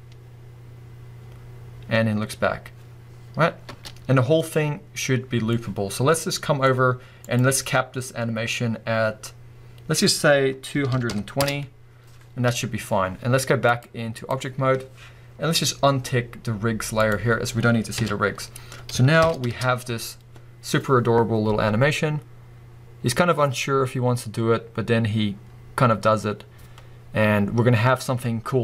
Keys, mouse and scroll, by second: 3.7 space, 7.3-17.1 drag, 10.9 2, 11.4 Return, 17.9 KP_1, 19.2 shift+Left, 19.5 space.